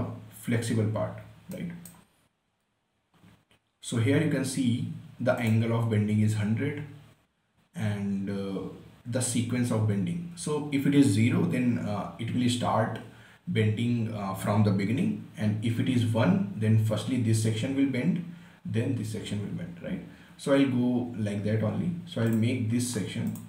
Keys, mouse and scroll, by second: 1.6-1.9 scroll down 1, 1.9-4.7 right drag, 5.7 click, 22.7 click.